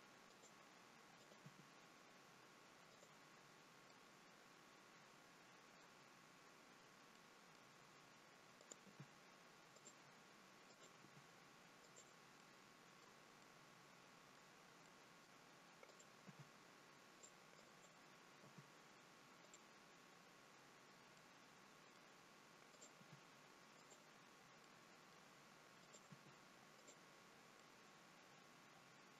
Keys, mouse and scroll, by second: 1.3 click, 1.5 g, 4.0 middle click, 7.2 middle click, 8.6 click, 9.0 g, 10.8 click, 11.1 g, 12.5 middle click, 13.5 middle click, 14.9 middle click, 15.9 click, 16.3 g, 17.6 click, 18.5 g, 21.2 middle click, 22.8 click, 23.1 g, 24.7 middle click, 25.8 click, 26.2 g, 27.2 scroll down 2, 27.6 middle click.